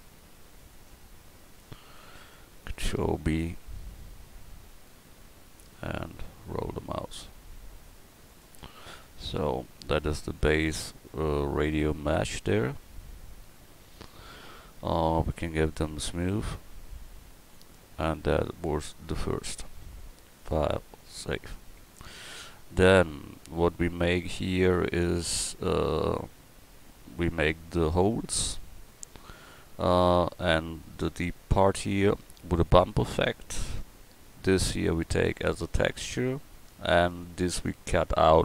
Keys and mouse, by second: 1.5 middle click, 3.7 ctrl+b, 8.7 Tab, 13.9 KP_4, 13.9 KP_1.